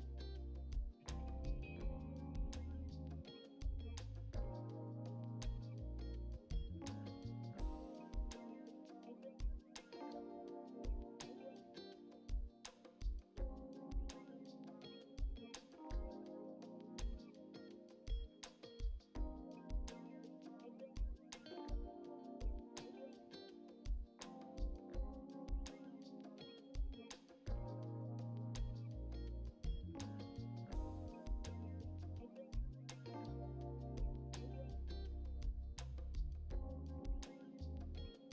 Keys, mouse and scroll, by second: 0.8 scroll up 1, 0.9 shift+middle click, 1.4 click, 1.8 scroll down 2, 1.9 middle click, 2.9-4.4 middle drag, 4.4 click, 5.7-7.1 middle drag, 7.2 click, 8.1 ctrl+z, 8.2 ctrl+z, 8.8-10.2 drag, 10.2-10.7 scroll up 1, 10.9 click, 11.2 middle click, 11.4 scroll down 1, 11.6 click, 11.7 Tab, 11.8-12.4 shift+middle drag, 12.4 click, 12.6 middle drag, 12.9 click, 13.1 Tab, 13.3 shift+middle click, 14.0 scroll up 1, 14.2 shift+middle click, 14.9 scroll down 1, 14.9 shift+middle click, 15.7 click, 16.0 click, 17.1 shift+middle click, 17.4 click, 18.2 click, 18.4 scroll down 2, 18.7 shift+middle click, 19.1 e, 20.1 shift+middle click, 20.5 scroll up 2, 21.5 scroll down 2, 21.6 shift+middle click, 22.1 w, 22.5 Escape, 22.8 click, 24.0 e, 24.9 middle click, 25.2 click, 25.5 alt+z, 25.7 shift+middle click, 26.1 alt+z, 26.2 shift+middle click, 26.8 click, 27.0 shift+middle click, 27.4 scroll down 1, 27.7 click, 28.4 shift+middle click, 29.4 scroll up 4, 29.5 click, 29.8 scroll down 4, 29.9-31.2 shift+middle drag, 31.5 click, 32.2 ctrl+z, 32.8 click, 33.1 middle click, 33.9 shift+middle click, 34.6 ctrl+z, 34.7 shift+middle click, 35.2-35.8 drag, 36.1 click, 36.3 middle click, 36.6 ctrl+z, 36.9 shift+middle click, 37.2 click, 37.8 click, 38.0 ctrl+z, 38.2 shift+middle click.